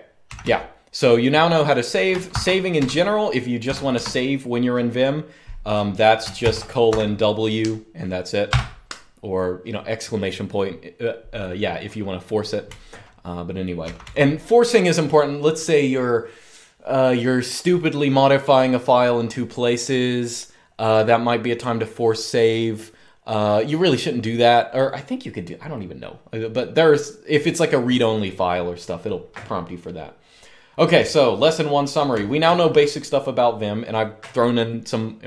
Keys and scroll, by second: 0.0-0.6 typing, 2.0-4.7 typing, 3.7 Escape, 5.9-7.1 typing, 8.2 typing, 12.4-13.8 typing, 30.7-31.9 j, 31.9-32.4 k.